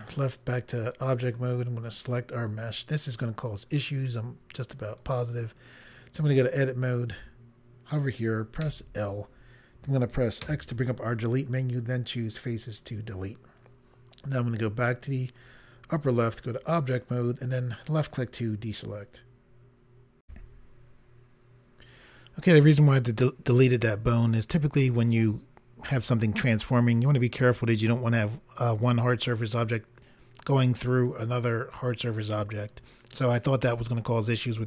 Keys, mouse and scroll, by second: 0.0 click, 0.9 click, 2.0 click, 4.9 click, 5.8 click, 8.6 l, 10.4 x, 12.3 click, 15.3 click, 16.5 click, 17.7 click, 20.2 Pause.